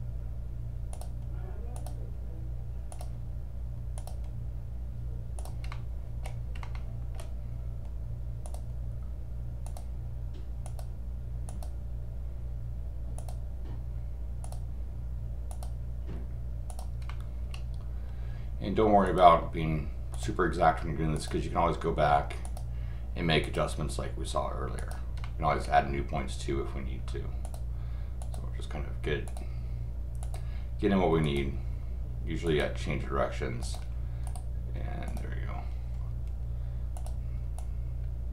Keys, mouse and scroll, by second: 0.9 click, 1.7 click, 2.9 click, 4.0 click, 5.3 click, 5.7 middle click, 6.5 scroll up 2, 6.7 middle click, 8.4 click, 9.6 click, 10.6 click, 11.5 click, 13.2 click, 14.4 click, 15.5 click, 16.7 click, 17.1 middle click, 19.0 click, 20.1 click, 21.1 click, 22.4 click, 23.4 click, 24.8 click, 25.2 middle click, 27.4 click, 28.2 click, 29.2 click, 30.2 click, 31.2 click, 32.4 click, 33.6 click, 34.2 right click, 35.1 click, 36.9 click, 37.5-38.3 drag.